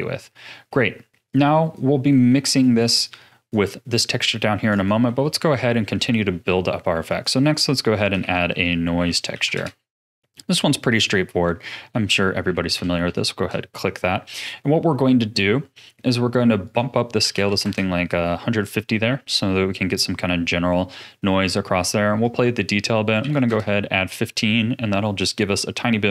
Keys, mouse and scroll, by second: 0.2-0.7 middle drag, 0.7-1.2 scroll down 3, 1.2 click, 2.0 middle click, 2.6 click, 3.0 click, 4.3-4.7 middle drag, 4.7 click, 5.2 ctrl+s, 5.7-6.9 middle drag, 6.9 shift+a, 11.4-13.1 middle drag, 13.1 ctrl+shift+click, 13.8-14.2 scroll up 3, 14.2 middle click, 14.6-15.0 scroll up 3, 15.0-16.6 middle drag, 16.6-19.6 drag, 22.2-24.4 drag, 24.4 scroll up 6, 24.5 middle click.